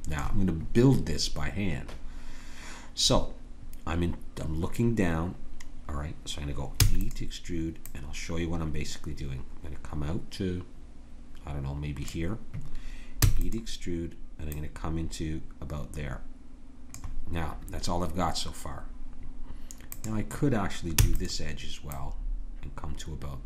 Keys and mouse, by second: 6.8 e, 7.9-10.0 drag, 13.2 e, 14.5-16.4 drag, 19.9-21.0 drag, 21.0 e.